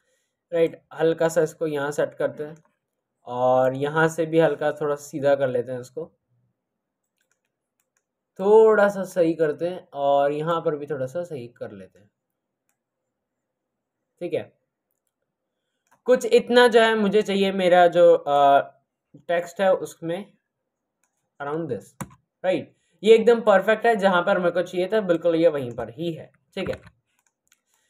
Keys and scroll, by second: 21.9 Return, 26.6 ctrl+z.